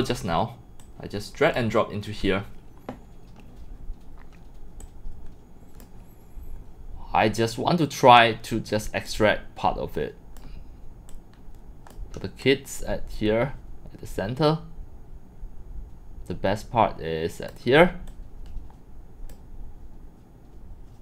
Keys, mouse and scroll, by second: 0.8 click, 4.8-5.8 drag, 9.1-10.4 drag, 11.1-11.9 drag, 12.4-13.6 drag, 14.8 click, 15.4-17.5 drag, 18.1-19.3 drag.